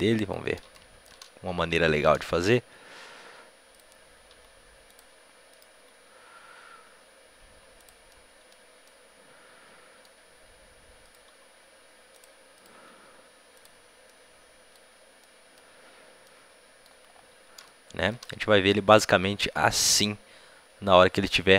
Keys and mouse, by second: 2.3 r, 4.2-7.3 right drag, 4.2 r, 5.5-6.6 drag, 5.6 r, 8.1-11.0 drag, 11.0-14.2 right drag, 11.2 r, 12.5-15.8 drag, 12.6 r, 14.0 middle click, 15.2 middle click, 17.6 middle click, 17.8 middle click, 18.0 middle click, 18.5-21.5 middle drag.